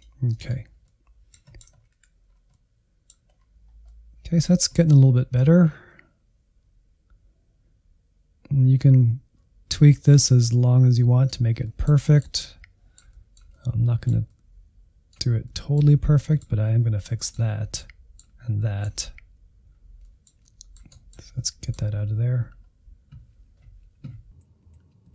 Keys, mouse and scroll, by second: 0.6 scroll down 1, 0.8-1.8 middle drag, 1.8 scroll up 1, 1.9 Insert, 2.2 scroll down 1, 2.5 middle click, 3.3-3.8 scroll up 2, 3.8-5.4 middle drag, 5.4-11.6 drag, 11.6-15.9 middle drag, 15.9 scroll up 1, 16.2-17.4 middle drag, 17.4 scroll up 1, 17.5 scroll down 1, 17.8 middle click, 18.2-18.6 scroll down 1, 18.6-21.4 middle drag, 21.4-22.3 scroll up 1, 22.8 middle click, 23.5 click, 24.2 Insert, 24.5 middle click.